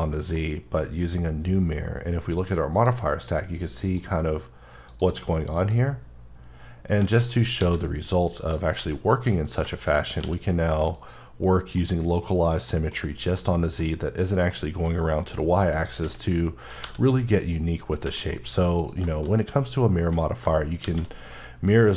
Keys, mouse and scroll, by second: 3.8 click, 7.3 shift+right click, 7.6 shift+a, 8.4 click, 8.8 s, 9.5 click, 10.2 q, 10.9 click, 11.6 middle click, 13.0 scroll down 1, 13.4 middle click, 14.9 scroll up 2, 15.2 middle click, 15.5-16.0 scroll up 2, 16.0 s, 16.7 click, 16.8 g, 17.4 click, 17.8 scroll down 1, 18.0 h, 18.2 middle click, 18.4-18.8 scroll up 3, 18.8 click, 19.1 middle click, 20.8 shift+a.